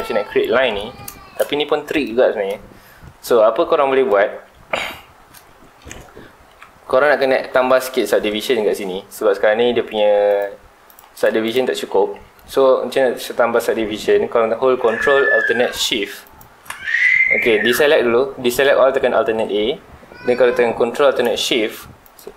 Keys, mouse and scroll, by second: 0.8 ctrl+s, 1.2 shift+middle drag, 1.4 scroll up 1, 1.9 click, 2.1 Tab, 2.3 scroll down 1, 2.5 shift+scroll up 1, 2.5 shift+middle click, 3.3 scroll down 1, 3.5-5.0 middle drag, 5.0-5.4 scroll up 2, 5.4 shift+middle click, 5.9-9.1 scroll up 2, 9.1 scroll up 1, 9.1 2, 10.0 3, 10.3 click, 10.8 click, 11.1 click, 11.4 click, 11.9 2, 16.2 ctrl+alt+shift+click, 16.9 alt+a, 19.2 alt+a, 22.0 ctrl+alt+shift+click.